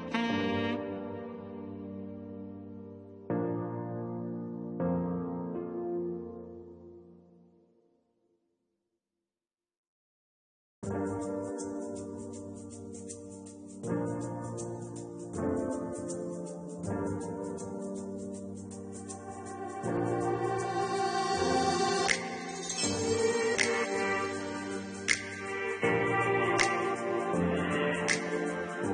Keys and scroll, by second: 14.9 4.